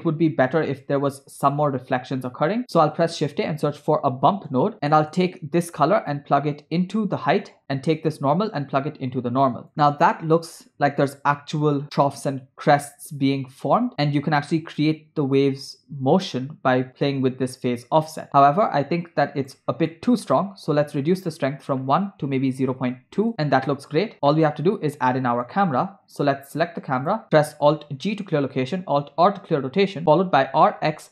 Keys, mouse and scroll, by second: 2.8 shift+a, 4.9 middle click, 6.2-7.6 drag, 8.1-9.7 drag, 9.7 middle click, 14.8-19.6 shift+drag, 19.9 middle click, 20.3 scroll up 2, 21.2-23.3 drag, 24.1 scroll down 2, 24.3-25.8 middle drag, 27.0 click, 28.1 alt+g, 29.3 alt+r, 30.4 r.